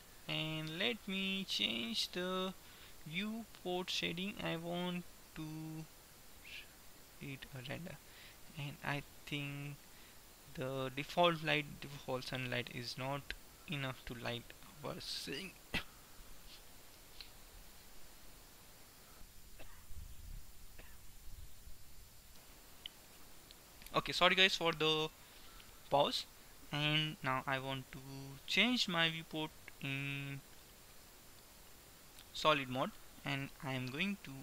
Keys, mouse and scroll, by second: 3.8-5.6 middle drag, 6.4 middle click, 8.9 middle click, 11.3 middle click, 11.6-13.4 drag, 11.6 typing, 29.3-31.3 middle drag, 31.4-32.8 drag, 32.8 middle click.